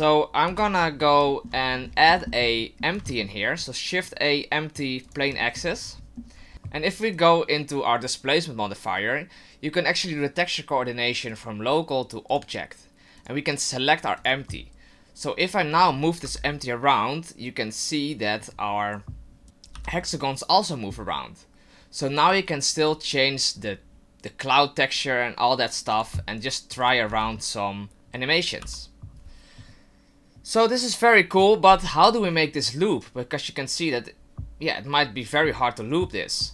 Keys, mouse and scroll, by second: 0.5 shift+c, 1.3 shift+middle click, 1.6-2.4 scroll up 16, 2.3 shift+middle click, 3.0 shift+a, 5.4 shift+middle click, 7.1 right click, 11.3 click, 13.2 click, 15.4 right click, 16.2 g, 22.8 right click, 23.5 click, 25.1 click, 26.8 right click, 27.1 g, 28.6 g.